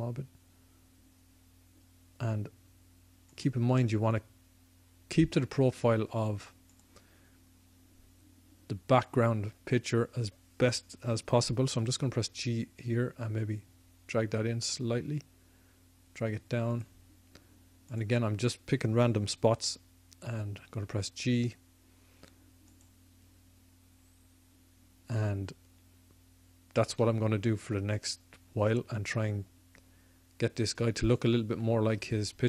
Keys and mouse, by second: 3.3-5.1 drag, 6.7-11.5 drag, 11.7 g, 16.8-19.7 drag, 19.5 g, 23.1-27.1 drag, 27.1-29.7 middle drag.